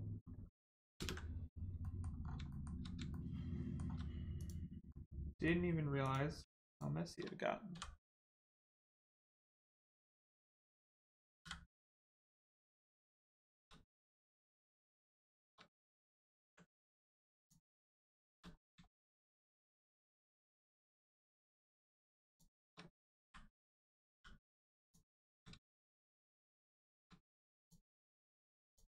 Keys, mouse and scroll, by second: 0.2-0.7 scroll down 1, 0.9 ctrl+space, 1.8 middle click, 2.2 scroll up 1, 2.4 shift+middle click, 4.3 middle click, 4.4 click, 4.8 middle click, 6.0 click, 6.6 shift+click, 12.4 click, 12.8 shift+middle click, 14.2 click, 14.6 shift+click, 15.0 shift+click, 15.9 ctrl+click, 17.4 click, 18.5 scroll up 1, 18.8 shift+middle click, 20.1 shift+click, 21.4 shift+click, 22.2 shift+click, 23.7 right click, 24.0 m, 24.8 click, 25.6 shift+middle click, 27.6 middle click, 28.0 shift+click, 28.6 shift+click.